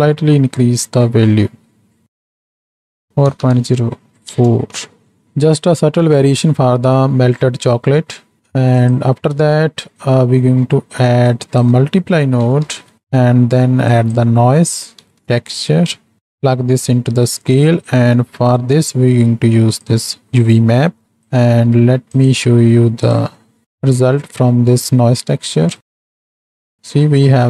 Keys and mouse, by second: 8.2 middle click, 8.8 click, 11.3-13.0 drag, 13.0 middle click, 13.9-16.2 drag, 16.6-17.4 drag, 17.8 middle click, 18.7-19.9 drag, 20.3 middle click, 21.0 middle drag, 22.3-23.6 drag, 23.6 middle click, 25.8-27.4 drag.